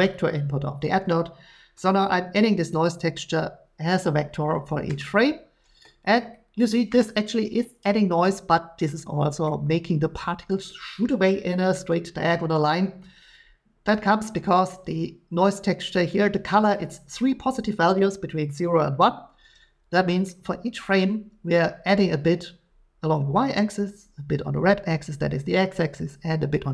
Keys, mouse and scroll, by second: 2.7 click, 6.6 shift+middle click, 9.4 middle click, 11.5-14.5 shift+middle drag, 15.9-20.0 drag, 20.9 middle click.